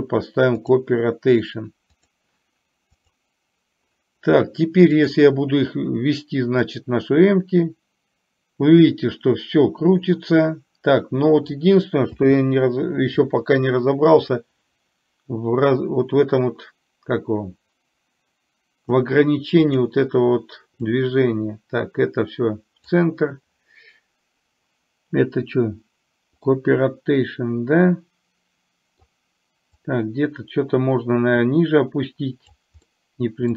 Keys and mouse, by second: 5.0 click, 6.9-11.5 drag, 14.5 click, 14.8-19.2 drag, 19.7 click, 20.9-23.0 drag, 26.7-29.2 middle drag, 30.0 click, 30.3-32.7 drag, 32.9-33.5 middle drag.